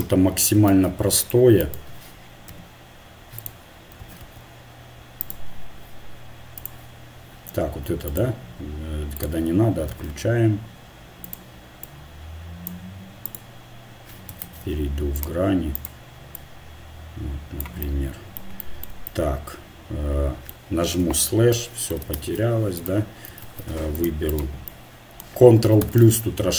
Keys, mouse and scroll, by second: 0.7 ctrl+Tab, 1.6 click, 2.5 e, 4.0 s, 6.6-8.0 drag, 8.0-9.9 right drag, 9.9 s, 11.8-13.1 drag, 13.3 click, 13.3 right click, 14.2 right click, 14.4 ctrl+Tab, 15.8-17.8 right drag, 16.4-17.6 drag, 21.0 KP_Divide, 22.2 ctrl+Tab, 23.4 ctrl+Tab, 24.5-26.0 drag, 25.8 ctrl+KP_Add.